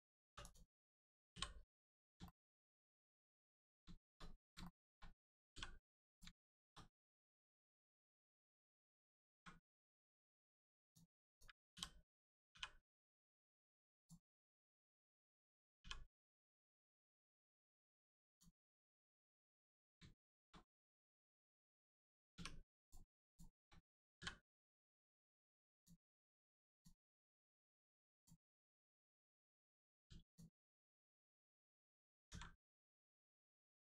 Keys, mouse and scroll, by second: 0.3 3, 0.4 click, 1.7 scroll down 1, 2.3 shift+middle click, 2.8 middle click, 2.9 middle click, 3.3 shift+middle click, 6.1 click, 6.4 shift+middle click, 7.3 click, 8.5 shift+middle click, 10.9 click, 12.5 r, 13.9 click, 14.2 scroll up 1, 14.6 shift+middle click, 15.8 middle click, 18.3 click, 19.0 scroll up 1, 19.8 click, 20.2 shift+middle click, 20.6 scroll up 1, 21.0 middle click, 22.8 click, 23.2 shift+click, 24.2 click, 25.7 click, 28.2 click, 28.5-29.1 scroll down 1, 30.0 2, 30.2 click.